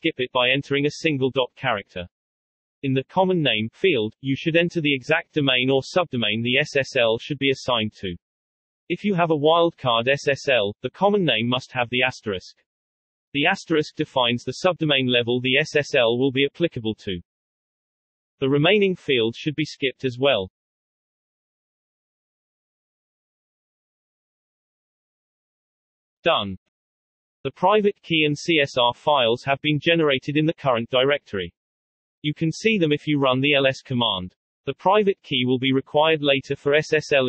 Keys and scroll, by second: 1.0-1.7 typing, 3.6-7.1 typing, 17.7 Return, 19.2-21.6 typing, 23.0-24.0 typing, 25.0 Return, 26.3 typing, 31.6-32.6 typing.